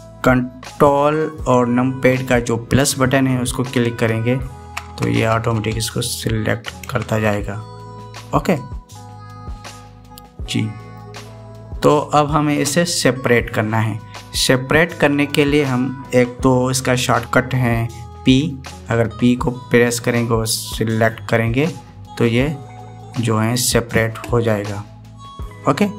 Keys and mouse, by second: 4.6 ctrl+KP_Add, 5.1 ctrl+KP_Add, 5.7 ctrl+KP_Add, 6.0 ctrl+KP_Add, 6.3 ctrl+KP_Add, 7.6 ctrl+KP_Add, 9.3 click, 10.1-11.7 middle drag, 18.9 p.